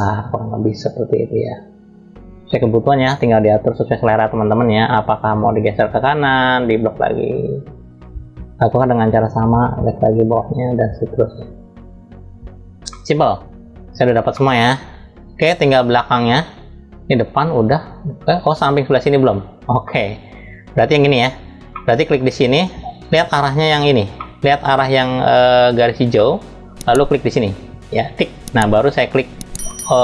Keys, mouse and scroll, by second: 4.6 click, 12.6-14.1 middle drag, 19.5 middle click, 21.4 middle click, 22.1-23.8 drag, 23.8 middle click, 25.8 middle click, 27.7 click.